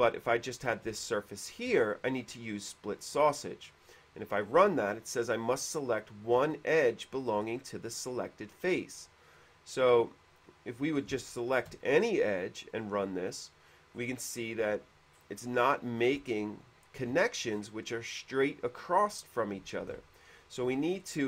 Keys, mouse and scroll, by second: 0.2 click, 1.3 shift+middle click, 1.8 shift+middle click, 4.1 click, 7.4 click, 11.4 shift+middle click, 11.7 shift+click, 13.0 click, 14.0 middle click, 14.2-14.8 scroll up 4, 14.5 middle click, 14.8 middle click, 15.5-16.2 scroll up 2, 16.5 shift+middle click, 17.6-18.0 scroll up 2, 20.2 ctrl+z, 21.2 scroll up 2.